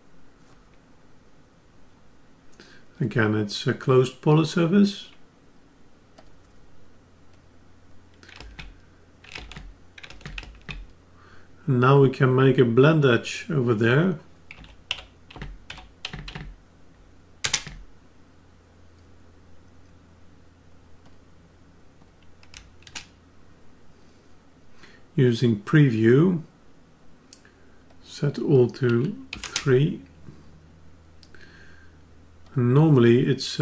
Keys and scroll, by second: 9.3 ctrl+alt+s.